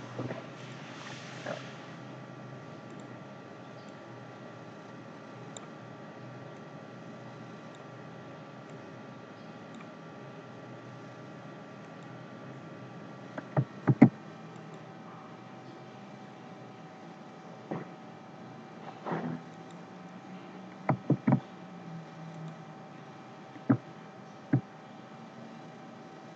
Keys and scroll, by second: 13.8 ctrl+z, 21.1 ctrl+z.